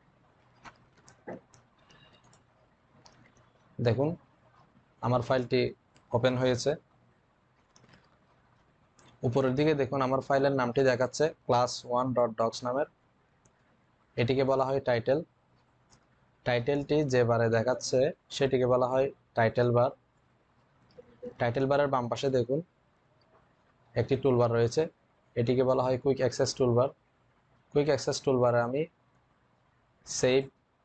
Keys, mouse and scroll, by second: 1.9 click.